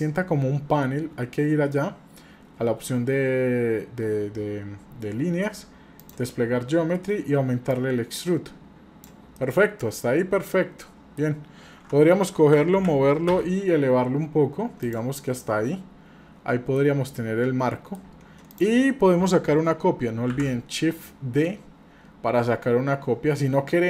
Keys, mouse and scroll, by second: 5.0-6.0 scroll up 3, 6.0 click, 7.7-9.1 drag, 9.4-11.2 middle drag, 11.8 Tab, 12.7 g, 15.4-16.8 middle drag, 16.8-17.1 scroll down 1, 17.1-18.0 middle drag, 18.5 click, 20.3 shift+d.